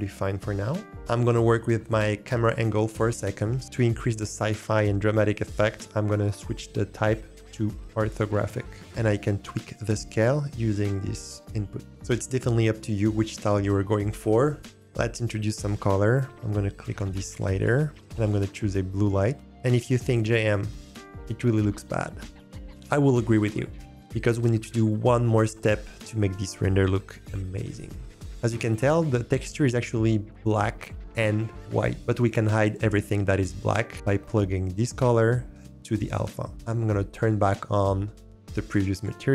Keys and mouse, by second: 5.7-8.2 drag, 10.5-11.9 drag, 11.9 shift+click, 12.8 shift+click, 17.6 click, 29.3 g, 31.6 shift+click, 34.3 click, 34.5-35.9 drag, 38.9 click.